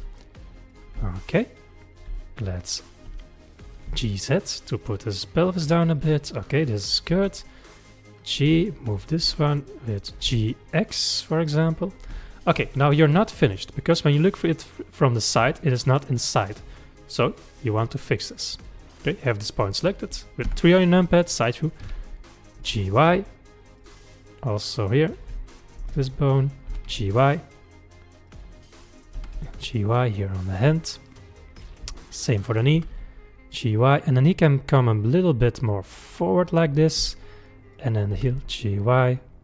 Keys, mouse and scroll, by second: 0.0 g, 1.2-2.6 shift+middle drag, 2.6 click, 3.1 g, 6.8 click, 7.1 g, 8.9 click, 9.3 g, 12.2 shift+middle click, 12.7-13.1 scroll down 1, 13.7-16.8 middle drag, 17.2-19.0 middle drag, 19.0 click, 20.5 KP_3, 21.9 g, 24.7 click, 25.9 click, 26.7 g, 28.7 click, 29.2 g, 32.1 click, 32.8 g, 37.8 click, 38.2 g.